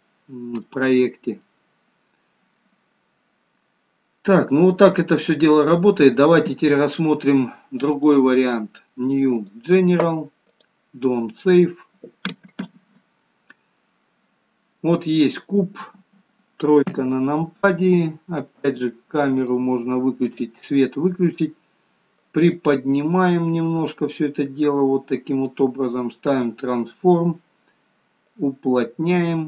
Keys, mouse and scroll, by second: 0.4 scroll down 2, 1.0 middle click, 1.7 scroll up 2, 2.7 scroll down 1, 3.1 middle click, 3.3 scroll down 2, 5.4 middle click, 8.4 click.